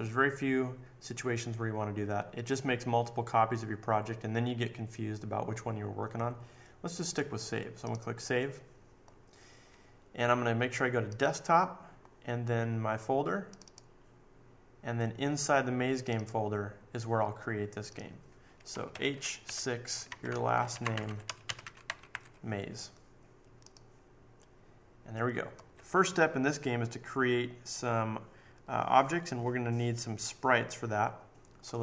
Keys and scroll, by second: 18.9-22.1 typing.